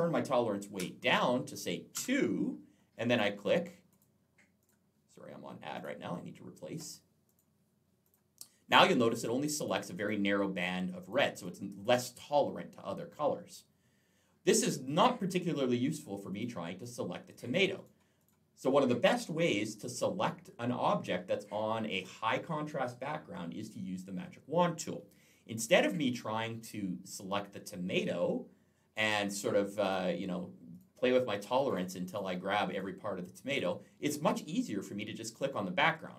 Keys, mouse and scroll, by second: 0.7 2, 1.8 Return, 2.9 click, 3.7 click, 4.4 click, 5.6 click, 6.6 click, 7.1 click, 7.2 double click, 7.8 double click, 9.0 click, 9.8 click, 9.9 double click, 10.4 double click, 10.8 double click, 11.0 double click, 11.3 double click, 11.7 double click, 11.8 double click, 14.4 click, 15.0 click, 15.7 click, 16.1 click, 16.2 double click, 16.6 double click, 17.1 double click, 17.2 double click, 17.6 double click, 18.1 double click, 29.7 click, 30.5 click, 31.9 click, 35.8 click.